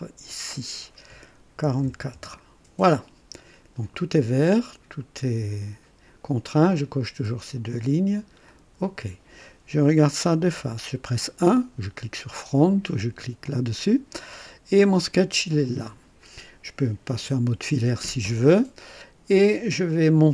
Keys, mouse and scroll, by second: 0.5 click, 1.6 KP_4, 2.1 KP_Enter, 2.1 Return, 8.4 click, 10.4 KP_1, 11.1-11.8 right drag, 13.4 click, 14.4 scroll up 1, 17.1 &, 19.8 click.